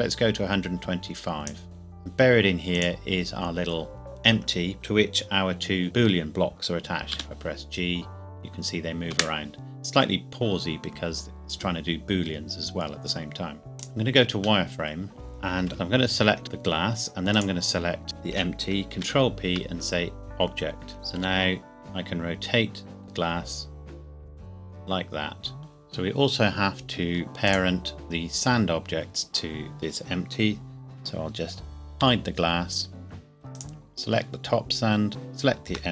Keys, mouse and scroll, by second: 1.6-2.0 scroll up 1, 2.8 click, 3.5-3.9 scroll down 1, 7.1 g, 9.1 Escape, 13.7 z, 13.8 click, 14.7 middle click, 15.4 scroll down 1, 15.7 click, 17.4 shift+click, 19.0 ctrl+p, 20.2 click, 21.4 r, 25.6 click, 27.5 click, 32.0 h, 33.6 click, 35.1 shift+click.